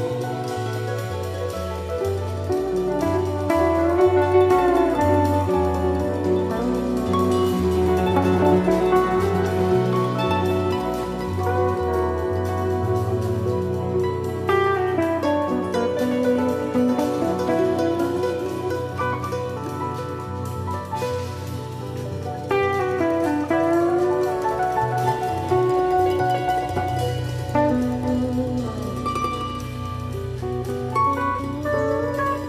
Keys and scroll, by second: 5.1 shift+Down, 7.3 shift+Up, 8.0 super+=, 8.6 Down, 11.9 super+-, 21.6 super+c, 22.3 super+f, 23.0 shift+Down, 27.0 shift+Down, 30.3 super+=.